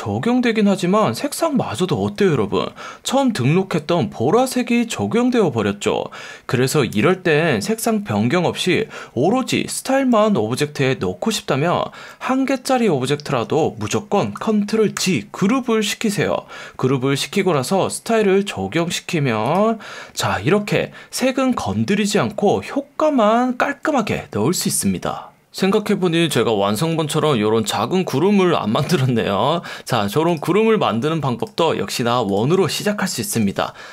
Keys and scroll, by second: 6.9 super+z, 12.1 F1, 13.4 F1, 15.0 super+g, 17.9 F1, 18.8 F1, 27.2 F1, 28.9 F1, 32.6 space, 33.3 l.